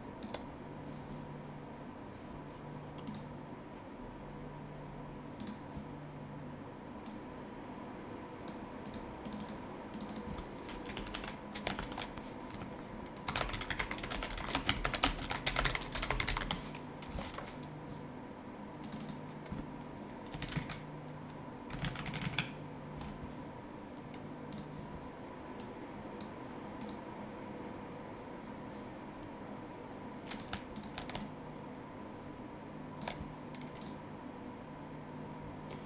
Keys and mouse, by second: 3.0 click, 5.4 click, 7.0 click, 8.8 click, 10.9 Down, 11.8 ctrl+shift+Left, 13.0-16.9 typing, 18.8 click, 20.3 KP_1, 20.4 KP_2, 21.7-22.3 typing, 24.5 click, 25.6 click, 26.8 click, 30.3 click, 30.7 click, 31.2 click, 33.8 click.